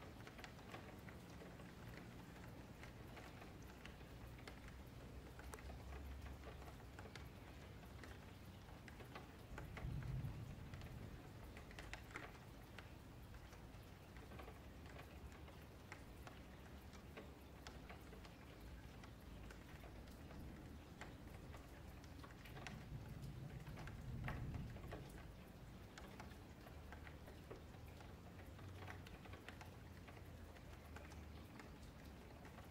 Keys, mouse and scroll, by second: 0.4 click, 0.8 shift+click, 1.0 j, 1.3 middle click, 2.0 2, 2.3 alt+click, 3.0 alt+shift+click, 3.9 middle click, 4.3 2, 4.6 alt+click, 5.5 alt+space, 6.4 alt+shift+click, 7.3 alt+shift+click, 8.2 alt+shift+click, 8.9 alt+space, 9.0 middle click, 10.0 click, 10.6 Tab, 11.4-12.1 middle drag, 12.1 alt+space, 12.6 alt+space, 13.3 KP_Divide, 14.2-14.8 scroll down 4, 14.8 ctrl+s, 14.9-15.8 scroll down 4, 15.8-18.7 drag, 18.7-19.1 scroll down 3, 19.1-20.9 middle drag, 20.9 click, 22.8-24.9 middle drag, 24.9-26.5 scroll up 1, 26.5-27.2 scroll up 9, 27.2 click, 27.7 F3, 28.5 shift+middle drag, 28.8-30.1 scroll down 3, 30.1 scroll up 2, 30.3-31.7 shift+middle drag, 31.7 shift+right click.